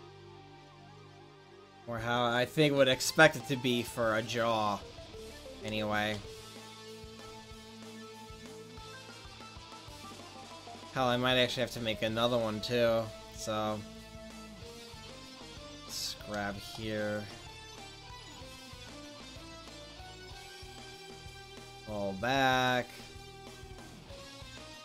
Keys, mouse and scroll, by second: 0.2-3.2 drag, 3.3 middle click, 5.4-8.8 right drag, 7.7-10.0 drag, 9.4-16.5 right drag, 15.0-16.3 drag, 16.0-17.6 middle drag, 18.8 right click, 19.1-21.2 middle drag, 21.2 click, 22.2 middle click, 23.2 middle click, 23.7 middle click.